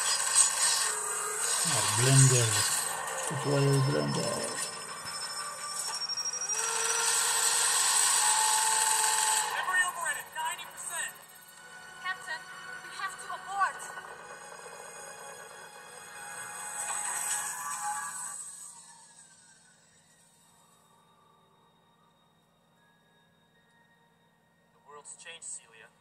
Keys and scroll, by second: 0.4 super+8.